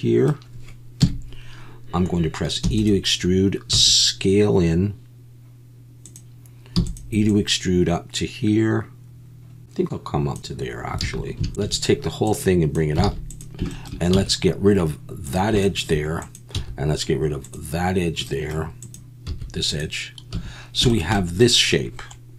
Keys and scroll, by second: 1.0 KP_1, 2.6 e, 3.7 s, 11.0 alt+a, 11.5 ctrl+z, 11.6 a, 13.0 alt+a, 14.1 x, 16.5 x, 19.3 x, 20.3 a.